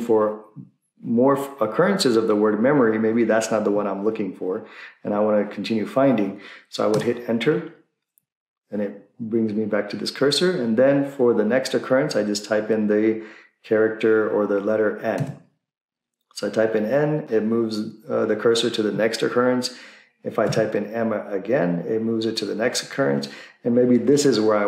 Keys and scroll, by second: 6.9 Return, 15.3 n, 20.5 n.